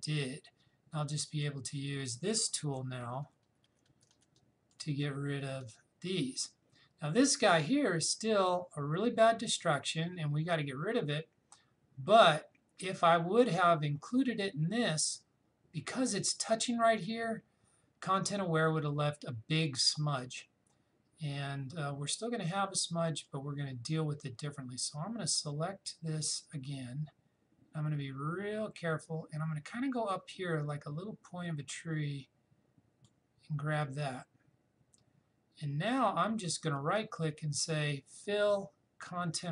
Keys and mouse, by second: 1.2 click, 2.8-4.0 typing, 4.4 click, 23.2-34.9 drag, 36.7 right click.